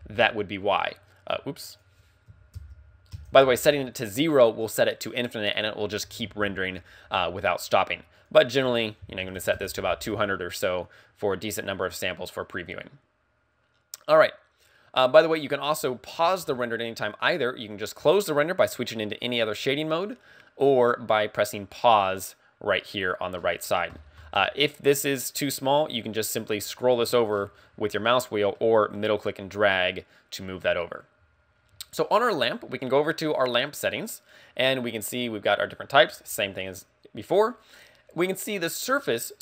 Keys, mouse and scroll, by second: 0.0 ctrl+click, 3.7 ctrl+click, 8.3 ctrl+click, 10.1 ctrl+click, 12.6 scroll up 2, 13.2 scroll down 1, 15.9-16.9 scroll down 14, 17.8 click, 19.4 scroll, 23.4-24.0 scroll down 4, 24.0-24.5 scroll up 6, 26.2-27.0 scroll up 9, 27.0 scroll down 1, 27.1-27.6 scroll down 8, 27.6-28.3 scroll up 2, 28.6 middle click, 33.9 click.